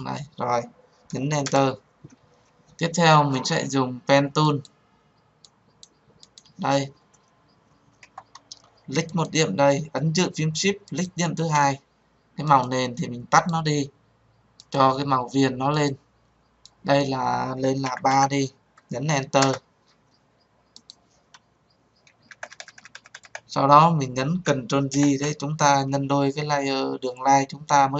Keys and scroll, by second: 1.3 Return, 24.5 ctrl+j.